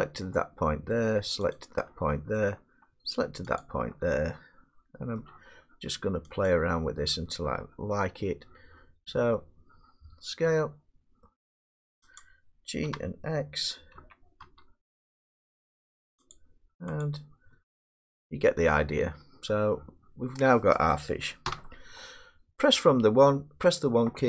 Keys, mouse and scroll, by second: 0.2 middle click, 1.6 shift+click, 5.1 middle click, 6.4 shift+click, 8.0 middle click, 8.1 middle click, 9.1 middle click, 10.4 s, 10.9 scroll down 1, 12.2 click, 12.9 g, 13.3 middle click, 13.9 z, 14.5 x, 16.3 click, 17.0 click, 18.1-18.6 scroll, 18.6 Tab, 19.4 middle click, 20.5 middle click, 21.4 1, 22.1 middle click.